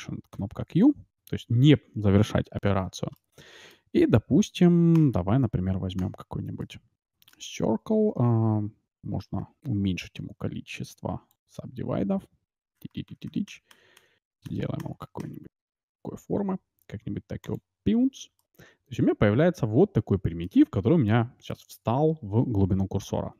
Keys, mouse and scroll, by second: 3.1-5.0 middle drag, 5.6-6.4 scroll up 1, 6.4 scroll up 1, 6.6-8.4 middle drag, 8.5-9.0 scroll up 1, 9.0-10.3 middle drag, 10.3-10.9 scroll down 1, 18.3-20.0 middle drag, 21.0-22.8 middle drag.